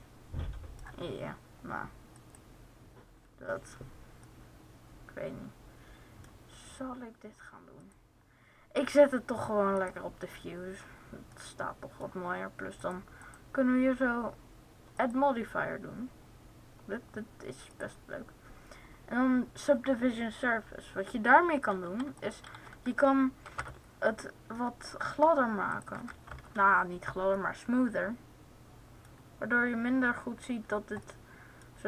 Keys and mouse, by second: 7.5-9.1 drag, 9.1 right click, 9.8-11.1 middle drag, 11.2 middle click, 12.8-15.0 drag, 15.0-17.1 right drag, 21.9-23.8 drag, 24.8 middle click, 25.5-27.2 drag.